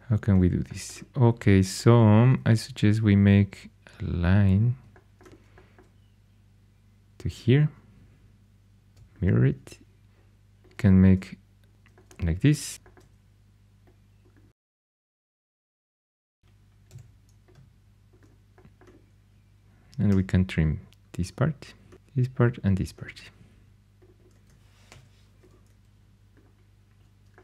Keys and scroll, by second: 2.3 shift+a, 8.9 alt+x, 12.7 g, 16.8 g, 20.0 t, 24.2 typing, 24.8 shift+Tab.